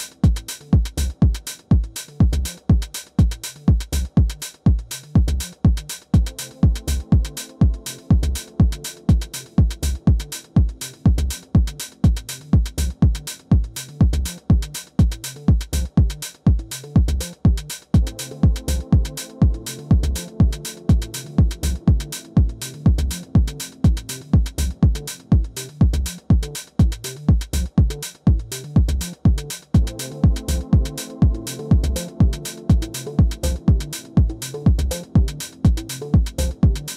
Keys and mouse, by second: 0.2-1.1 drag, 2.9 click, 4.2 alt+click, 5.4 r, 5.9 click, 8.0 alt+click, 8.8 click, 9.5 w, 10.0 click, 10.9 alt+middle drag, 11.1 alt+click, 11.6 alt+middle drag, 11.9 alt+click, 12.4 click, 12.9-13.3 alt+middle drag, 14.3 alt+click, 16.8 alt+click, 17.3 alt+middle click, 18.0-18.5 alt+drag, 18.6 alt+middle click, 19.1 3, 20.2 click, 21.3 Delete, 22.9 alt+click, 23.6 click, 25.6 alt+click, 26.8 alt+middle click, 29.0 click, 31.9-33.1 right drag, 33.1 3, 33.5 ctrl+z, 33.5 4, 35.0 click, 35.8 3, 36.7 click.